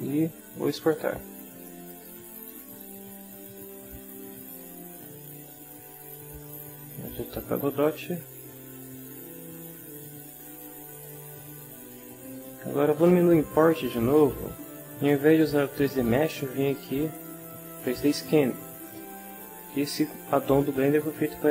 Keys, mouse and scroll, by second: 1.9 click, 5.4 alt+Tab, 6.1 alt+Tab, 10.9 click, 13.8 click, 18.8 click.